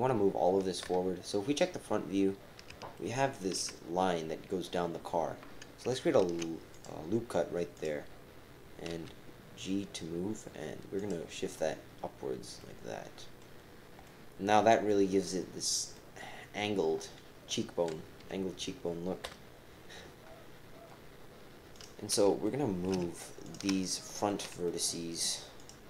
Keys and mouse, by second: 0.8 KP_1, 2.9 shift+click, 3.1 shift+middle click, 3.2 shift+KP_1, 6.2 ctrl+r, 8.9 g, 12.6 click, 14.0 middle click, 14.9 middle click, 15.9 middle click, 18.2 KP_3, 19.2 KP_1, 21.7 click, 22.4 shift+click, 22.4-22.8 typing, 22.6 shift+click, 22.9-23.9 shift+middle drag, 23.9 shift+click, 23.9-24.9 typing, 24.1 shift+click, 24.3 shift+middle click, 24.6 shift+click, 24.9 shift+middle click, 25.6 shift+click.